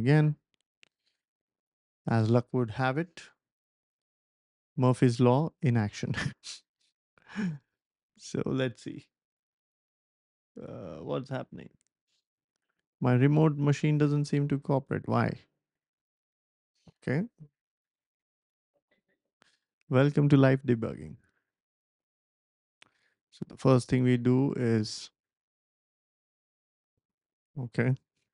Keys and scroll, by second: 17.2-18.9 typing, 21.9-22.6 typing.